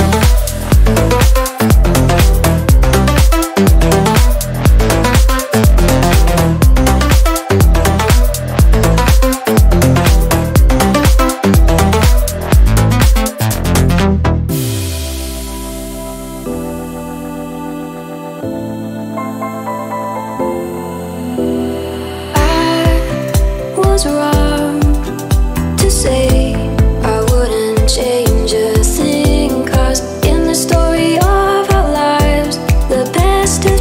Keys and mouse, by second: 3.1-8.0 middle drag, 8.0-11.1 drag, 11.6-13.5 middle drag, 13.5 click, 14.3-17.8 middle drag, 17.8-20.8 drag, 20.9-25.5 drag, 28.9 click, 29.7-30.9 middle drag, 30.9-31.7 drag, 31.7 g, 32.4 click, 32.8 middle click, 33.2 ctrl+a.